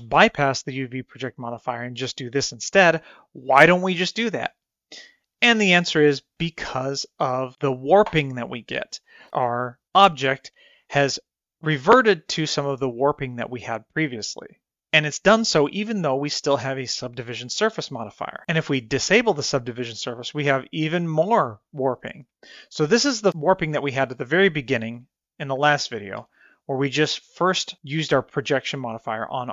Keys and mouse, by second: 8.3 middle click, 10.4 KP_1, 20.2 click, 23.6-24.5 middle drag, 24.7 middle click, 25.3 click, 26.9 Tab.